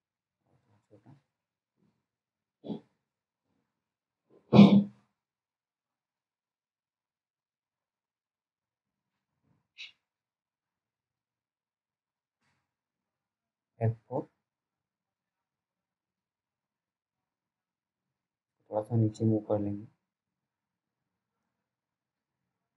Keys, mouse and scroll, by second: 2.8 click, 13.2-14.2 scroll up 1, 15.5 F4, 16.9 click.